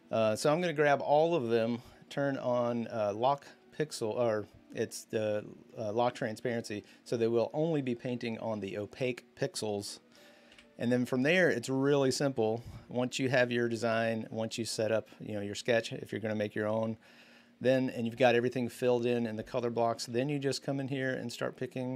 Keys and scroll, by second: 10.3 b, 12.0-13.4 typing.